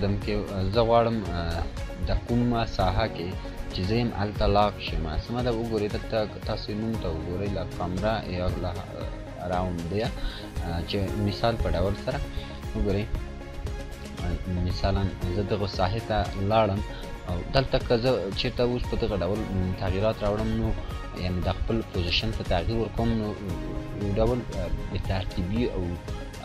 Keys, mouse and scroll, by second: 2.0 click, 3.2 scroll up 1, 12.6 scroll up 1, 12.7 click, 14.2-14.6 scroll down 1, 15.3 scroll up 1, 18.0-20.2 drag, 23.7-26.4 drag.